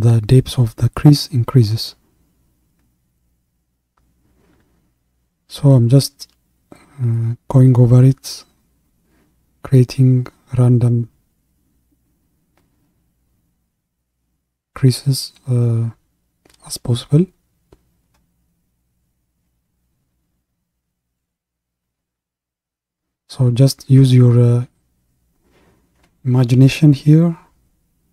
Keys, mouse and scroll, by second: 11.1-14.7 middle drag, 14.7-26.2 drag, 26.2-28.1 middle drag.